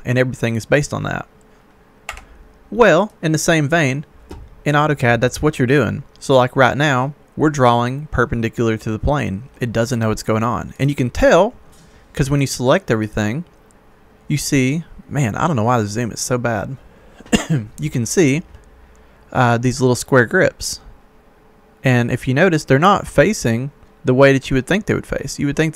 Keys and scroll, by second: 2.1 Escape.